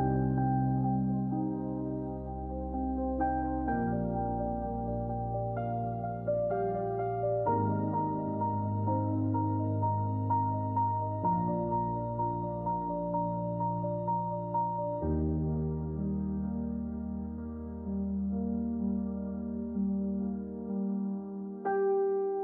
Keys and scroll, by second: 11.8 Return, 14.2 shift+d, 16.6 l, 19.1 Return.